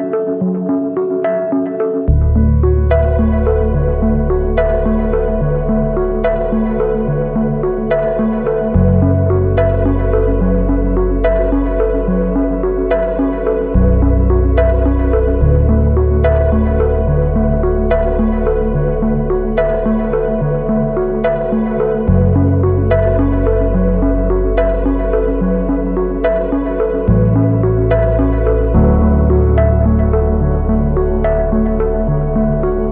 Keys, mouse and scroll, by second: 13.0 double click, 19.0-20.3 scroll up 1, 25.3-25.9 scroll down 1, 25.9-26.8 scroll up 1, 29.3-30.6 scroll down 1.